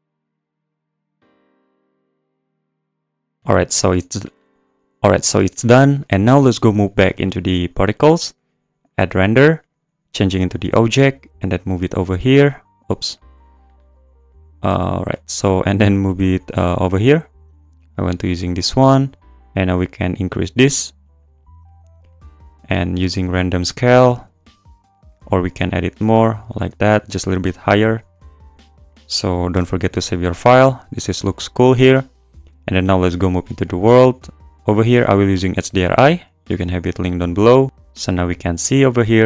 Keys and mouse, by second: 0.2 click, 1.0 click, 1.4 click, 2.0 click, 2.5 click, 2.9 click, 3.2 click, 9.6 click, 11.4 click, 14.3 drag, 17.9 click, 19.7-21.7 drag, 22.3 click, 25.1-26.5 drag, 26.9-28.2 drag, 28.9 click, 29.6 ctrl+s, 29.8 click, 33.7 click, 34.7-35.8 drag, 36.6 click, 38.3 click, 39.0 click.